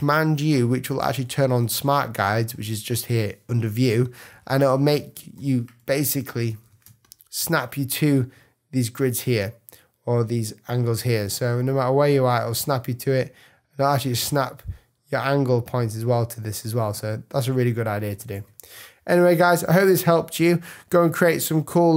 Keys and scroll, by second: 5.3 p, 6.1 super+p, 6.4 super+=, 6.8 super+space, 7.8 space, 18.1 super+z, 19.6 super+-.